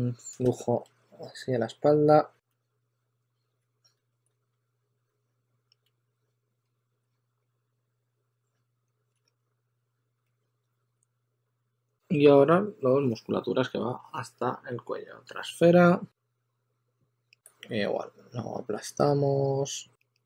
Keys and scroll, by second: 0.1 shift+super+x, 0.8 2, 2.2-6.9 typing, 8.0 2, 10.2 s, 17.4 w.